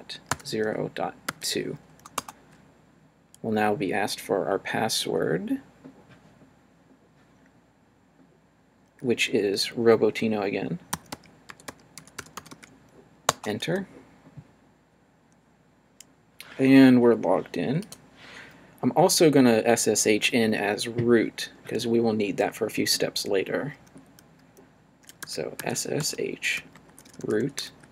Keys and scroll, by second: 0.0-1.3 typing, 2.1 Return, 10.7-13.0 typing, 13.3 Return, 25.0-27.9 typing.